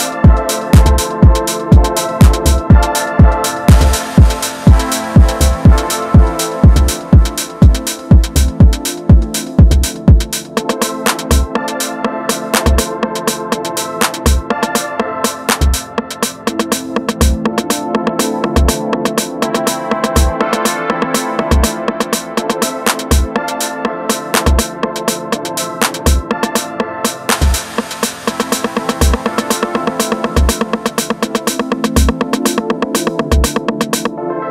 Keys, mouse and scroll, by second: 1.7-4.4 middle drag, 4.4 KP_1, 4.8-5.3 scroll up 1, 5.3-7.1 shift+middle drag, 7.1 Tab, 7.3-9.0 middle drag, 9.0 click, 9.4 middle click, 10.3 ctrl+shift+click, 13.6 click, 14.0-15.0 middle drag, 15.0 ctrl+shift+click, 16.1 g, 18.2 click, 19.8-21.5 middle drag, 21.5 click, 22.8 middle click, 23.5 Tab, 23.8 scroll down 1, 23.8-25.5 middle drag, 25.5 scroll down 2, 25.7-26.8 middle drag, 26.8 KP_1, 27.1-27.5 scroll up 1, 27.5-30.6 middle drag, 30.9-31.4 scroll up 1, 31.4-33.1 shift+middle drag, 33.1 KP_1, 33.3-34.0 scroll down 3, 34.0-34.5 shift+middle drag.